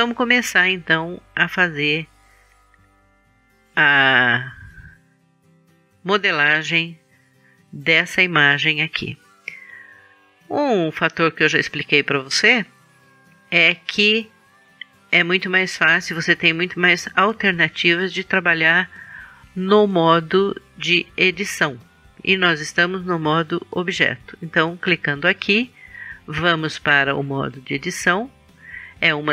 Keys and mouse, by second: 14.4-19.9 drag.